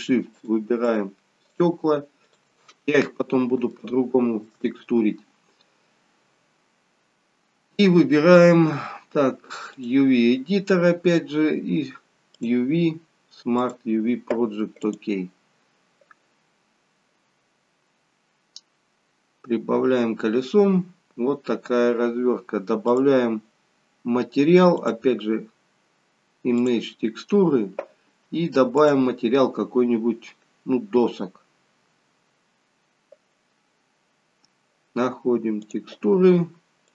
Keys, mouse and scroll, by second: 0.4 shift+click, 3.0-3.5 scroll down 5, 3.8 shift+middle click.